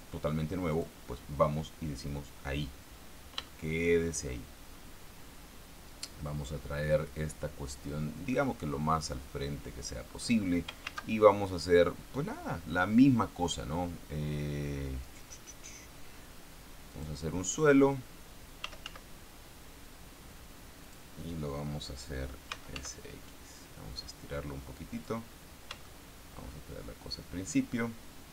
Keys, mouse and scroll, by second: 1.1 click, 3.9-12.1 shift+middle drag, 11.2 shift+a, 17.3 click, 19.0 s, 19.2 z, 21.2 click, 22.9 s, 23.1 x, 25.3 click, 26.2-28.3 shift+middle drag.